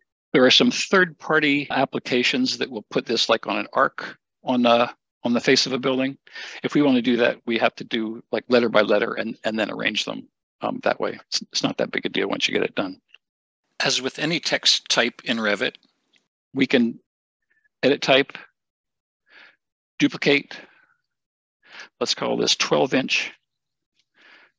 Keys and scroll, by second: 23.2 1, 23.9 shift+'.